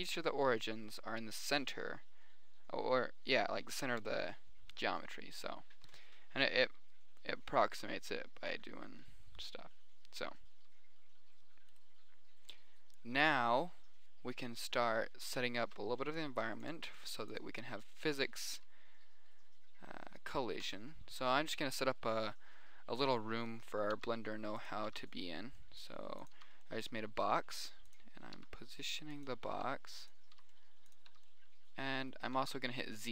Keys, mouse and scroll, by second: 4.4 middle click, 5.0-8.1 middle drag, 8.6-10.0 middle drag, 10.4-12.1 middle drag, 12.2-13.9 drag, 16.0 shift+a, 21.0 s, 21.3-21.8 middle drag, 22.4-23.3 middle drag, 23.3 KP_1, 24.3 g, 25.3 s, 26.8 g, 28.4 click, 28.7 s, 30.0 s, 30.8 g, 31.4 s, 32.8-33.1 typing.